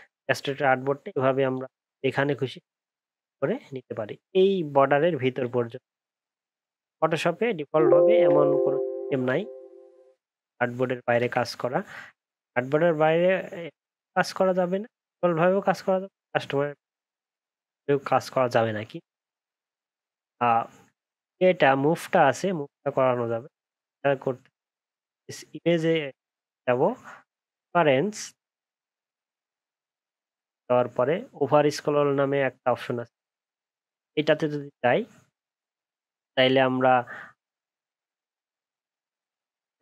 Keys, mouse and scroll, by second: 3.2-3.6 alt+scroll down 11, 8.6 alt+scroll up 5, 8.8 alt+scroll down 1, 9.7-11.4 alt+scroll down 11, 11.4-11.8 alt+scroll up 11, 18.6 alt+scroll down 1, 18.9 alt+scroll up 1, 20.4-20.8 alt+scroll down 6, 21.7-23.5 alt+scroll up 7.